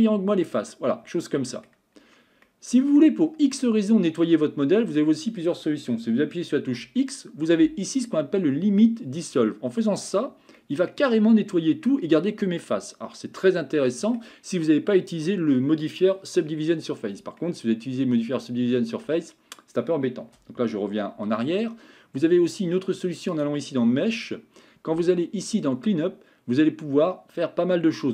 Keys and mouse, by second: 0.6-1.7 middle drag, 2.5 middle click, 3.6-5.0 middle drag, 10.6-14.2 middle drag, 17.4-19.0 middle drag, 21.1 ctrl+z, 23.3-28.1 drag.